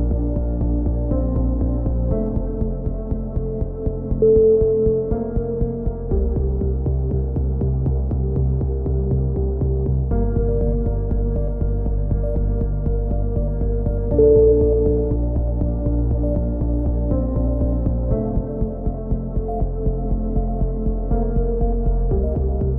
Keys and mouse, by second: 0.1 z, 0.4-1.5 drag, 2.9 k, 8.9 click, 9.1 a, 9.7 s, 10.6 ctrl+z, 11.3 ctrl+z, 12.1 k, 16.4 KP_3, 16.8 z, 17.6-19.9 drag, 19.5-20.5 right drag, 20.1 g, 21.7 a.